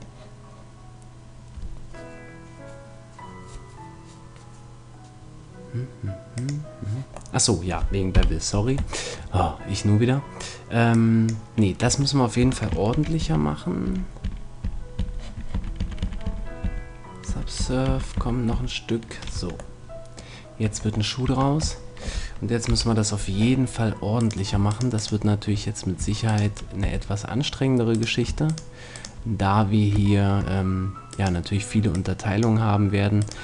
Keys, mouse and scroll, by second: 6.4-8.1 drag, 7.3 middle click, 8.1 KP_1, 10.9-12.6 drag, 11.8 Tab, 12.4 Tab, 12.9 ctrl+z, 13.2 ctrl+z, 13.8 ctrl+z, 14.2 ctrl+z, 14.6 ctrl+z, 15.0 ctrl+z, 15.5 ctrl+z, 15.9 ctrl+z, 16.0 ctrl+z, 16.2 ctrl+z, 16.6 ctrl+z, 17.3 ctrl+z, 17.6 ctrl+z, 17.9 ctrl+z, 18.2 ctrl+z, 18.5 ctrl+z, 19.4 Tab, 20.6 Tab, 21.2 Tab, 22.6 KP_1, 24.2-25.4 right drag, 26.8 f, 30.2 middle click, 30.4 right click, 30.9 middle click, 31.1-32.8 right drag, 31.9-33.4 drag, 33.2-33.4 right drag.